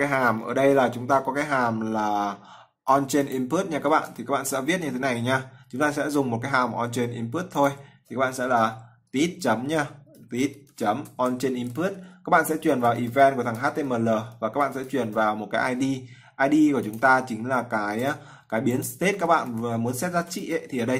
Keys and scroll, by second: 3.7 ctrl+c, 11.0 ctrl+v.